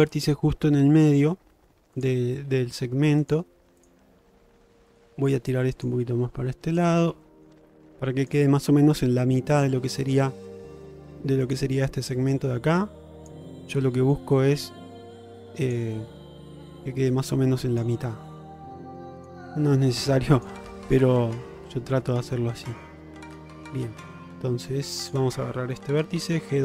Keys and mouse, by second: 2.5 g, 3.9 click, 4.3 g, 6.0 g, 7.3 shift+middle click, 8.3 click, 25.1 click, 26.1 g.